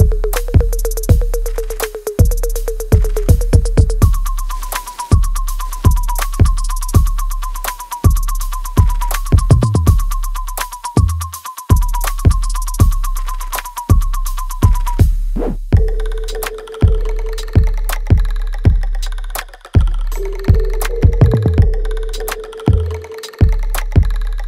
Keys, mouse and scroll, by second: 1.2 alt+middle click, 1.6 alt+right click, 2.1 alt+click, 2.8 right click, 3.6 alt+click, 4.3 click, 8.1 alt+click, 8.8 alt+right click, 9.3-11.1 alt+drag, 11.0 ctrl+b, 12.4 click, 13.6-16.5 ctrl+drag, 16.5 right click, 17.0 click, 17.3 alt+right click, 18.4 click, 18.7 alt+click, 20.7-21.7 scroll down 2, 21.7 alt+click, 22.2-23.2 scroll up 1, 23.2 click.